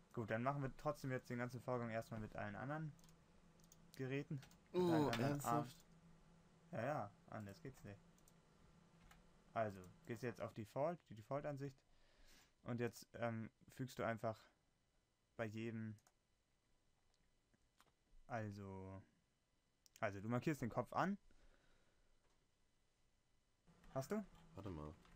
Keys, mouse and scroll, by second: 5.0 Tab.